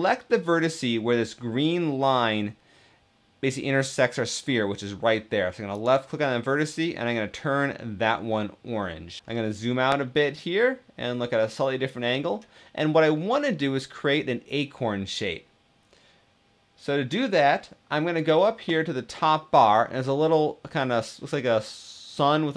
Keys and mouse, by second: 10.2 middle click.